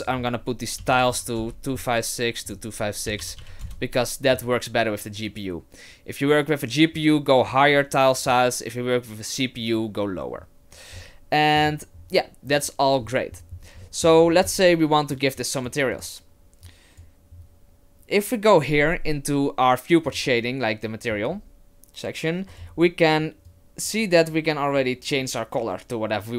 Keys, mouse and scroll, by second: 0.0 click, 2.5 click, 11.0 middle click, 11.9-13.5 scroll up 3, 13.5-15.1 scroll up 6, 13.8 middle click, 15.1 click, 15.1-15.6 scroll up 1, 15.9 click, 16.7 click, 20.2 click, 22.5 click.